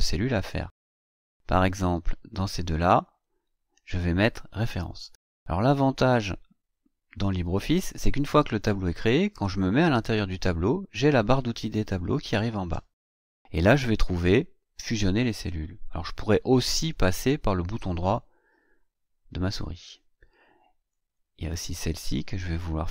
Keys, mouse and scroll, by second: 0.4 click, 2.3 click, 16.7 right click, 19.4 click, 20.9 click, 21.9 click, 22.3 click.